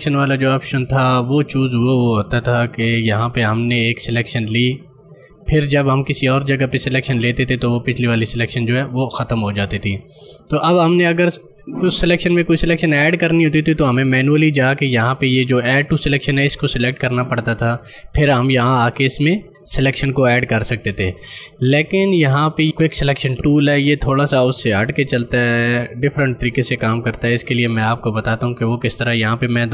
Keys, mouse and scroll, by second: 2.8 click, 16.7 click, 27.2 ctrl+d.